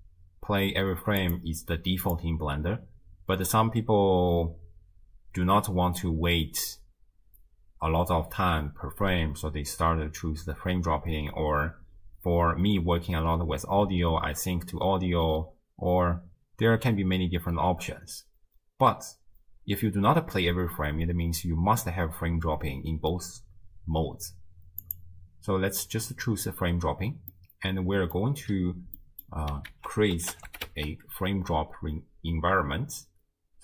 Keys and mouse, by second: 27.4 click, 27.6 right click, 27.9 right click, 29.0 click, 29.0 right click, 29.7 ctrl+a.